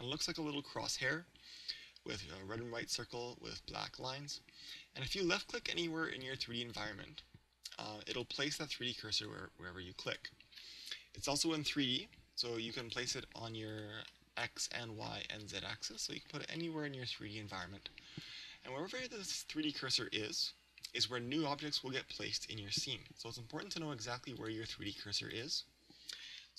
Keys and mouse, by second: 5.4-11.8 drag, 11.7 KP_3, 12.9-15.3 drag, 14.1-15.7 middle drag, 15.5-19.2 drag, 16.6-18.3 middle drag, 19.6 KP_1, 24.4-26.5 drag.